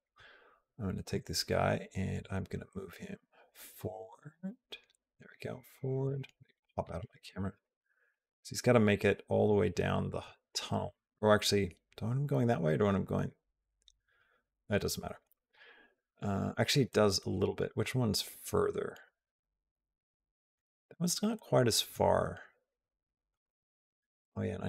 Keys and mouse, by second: 2.0-5.9 drag, 6.4 middle click, 7.5-8.5 shift+middle drag, 8.5 click, 10.1 click, 11.1 middle click, 12.3 middle click, 12.5 middle click, 13.6-15.1 middle drag, 16.7-20.4 middle drag, 21.2 middle click, 22.3 middle click, 24.0 middle click.